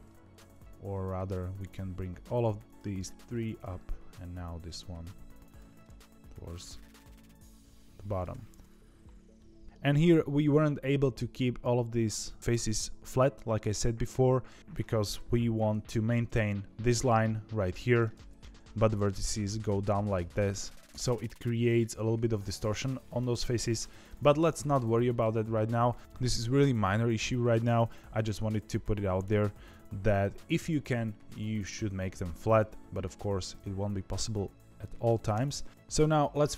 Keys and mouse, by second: 0.1 ctrl+z, 0.6 click, 1.2 g, 2.9 click, 3.3 g, 5.7-8.2 middle drag, 9.3 middle click, 15.0 KP_7, 15.8 shift+middle click, 20.1 middle click, 21.0 middle click, 22.7 middle click, 23.6 KP_3, 24.7 shift+middle click, 35.3 KP_7.